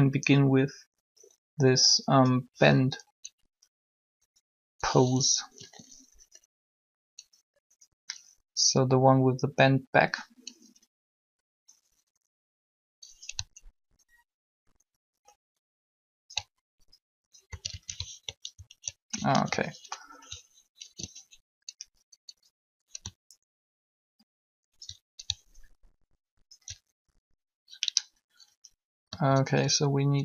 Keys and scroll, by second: 5.5 r, 7.6 i, 17.5 ctrl+a, 17.6 ctrl+a, 19.3 alt+r, 20.8 alt+g.